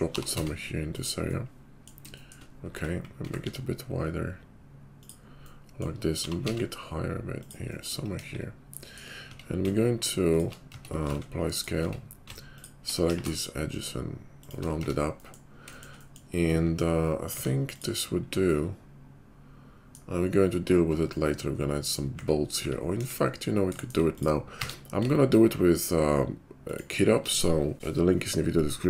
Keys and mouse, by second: 0.1 g, 2.7 Tab, 3.2 s, 6.1 g, 8.1 KP_5, 9.4 Tab, 10.7 Tab, 11.0 ctrl+a, 11.7 Tab, 12.5 ctrl+alt+middle click, 13.0 ctrl+KP_5, 13.0 ctrl+b, 14.8 Tab, 16.1-28.8 drag, 17.3 q, 22.1 `, 22.6 `, 22.9 KP_5, 24.1 middle click, 24.1 right click, 24.5 q.